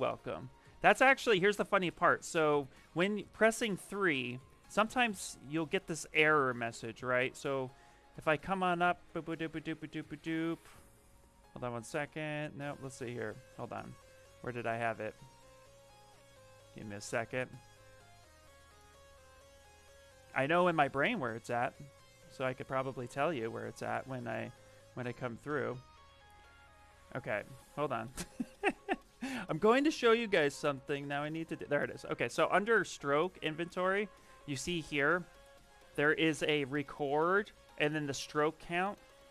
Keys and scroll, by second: 35.4 shift+m.